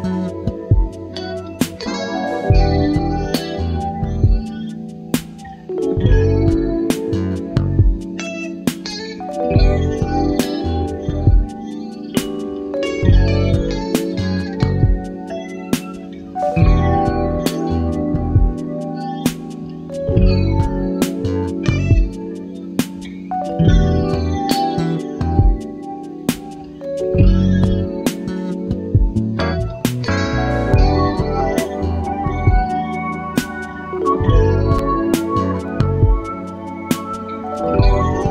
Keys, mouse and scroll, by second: 1.0 click, 2.1 click, 4.3 click, 5.1 click, 6.7 click, 7.3 click, 9.2 click, 11.5 click, 12.4 KP_1, 12.7 KP_2, 13.1 KP_Enter, 15.6 click, 16.4 KP_2, 16.5 KP_0, 16.9 KP_Enter, 19.2 click, 21.6-24.2 drag, 26.3 click, 27.3 KP_3, 27.5 KP_0, 28.5 KP_Enter, 33.2 click, 34.7 click, 36.0 click.